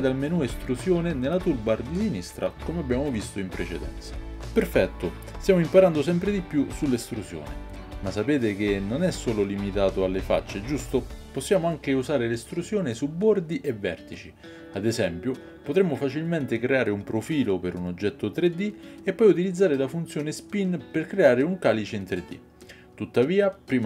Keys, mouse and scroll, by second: 6.2-23.8 right drag, 15.0-19.1 typing, 23.5 Tab.